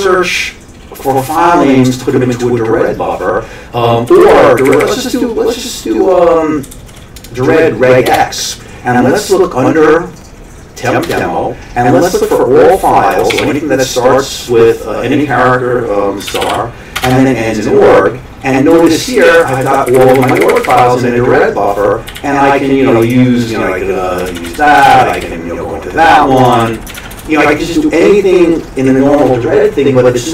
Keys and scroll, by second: 4.1 Down, 4.2 Down, 4.6 Up, 4.8 Up, 6.7 Down, 6.8 Down, 8.1 Return, 11.1 Return, 12.1 -, 13.3 typing, 16.0-16.9 typing, 17.0 Return, 18.7 Down, 18.9 Down, 19.0 Down, 19.2 Down, 19.9 Up, 20.0 Up, 20.2 Up, 20.3 Up, 22.1 o, 24.3 ctrl+x, 24.5 o, 24.9 ctrl+n, 25.2 o, 26.6 ctrl+x, 26.7 o, 26.9 ctrl+x, 27.2 1.